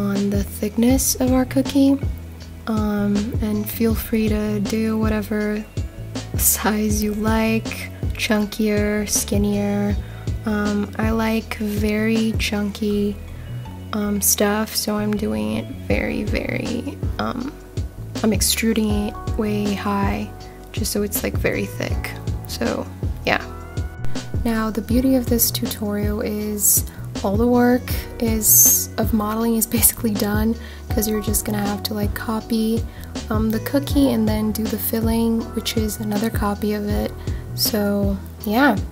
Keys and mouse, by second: 1.2 click, 1.7 middle click, 2.6 Tab, 3.5 Tab, 3.9 middle click, 4.9 ctrl+r, 5.4 click, 5.8 middle click, 6.9 ctrl+b, 9.4 click, 9.6 Tab, 10.1-12.9 middle drag, 13.3-14.3 right drag, 14.7 click, 15.0-20.0 middle drag, 20.4-20.8 middle drag, 21.2 click, 22.1 shift+d, 22.4 z, 23.2 click, 23.6 middle drag, 25.0 click, 25.5 shift+d, 25.7 z, 26.3 click, 28.0 s, 28.2 z, 30.8 click, 31.9 click, 32.2 ctrl+a, 32.6-34.1 middle drag, 35.2 ctrl+a, 35.8-36.4 middle drag, 37.5 g, 37.5 z.